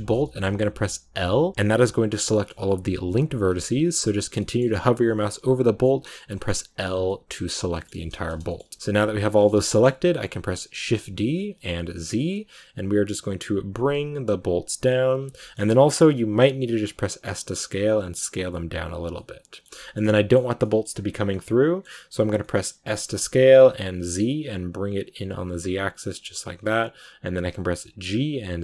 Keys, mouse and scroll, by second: 1.1 l, 1.7 middle click, 2.6-3.2 scroll up 1, 3.2 l, 3.3 scroll down 2, 3.4-4.5 middle drag, 4.5 scroll up 2, 5.3 l, 6.8 scroll down 2, 6.9-10.7 middle drag, 10.7 shift+d, 15.3 shift+middle click, 15.9-16.4 scroll up 2, 17.1 scroll up 1, 17.1 s, 19.0 middle click, 19.9 scroll up 1, 20.0-22.7 middle drag, 22.7 s.